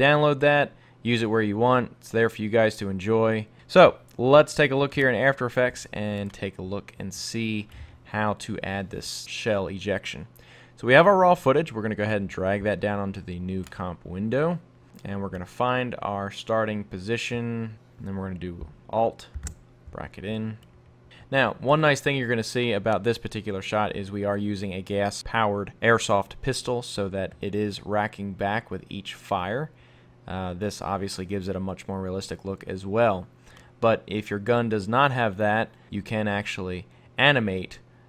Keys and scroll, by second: 19.4 alt+[.